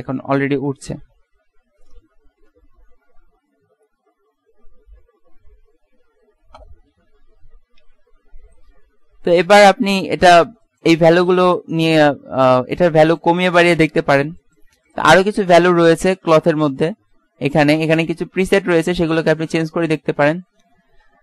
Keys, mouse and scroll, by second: 3.1 KP_1, 3.6 KP_3, 4.0 KP_1, 8.0 Escape, 9.2 z, 9.6 z, 15.4 z, 17.2-18.2 middle drag.